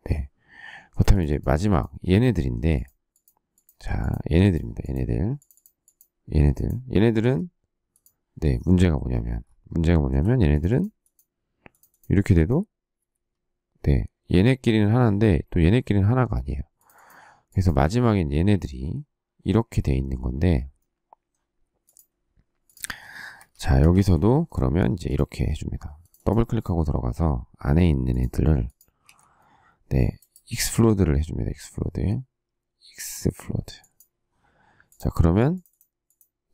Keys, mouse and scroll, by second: 2.3 shift+middle click, 7.1 Escape, 9.8 shift+middle click, 22.8 Escape, 23.0 Escape, 24.1 shift+middle click, 29.0 ctrl+a.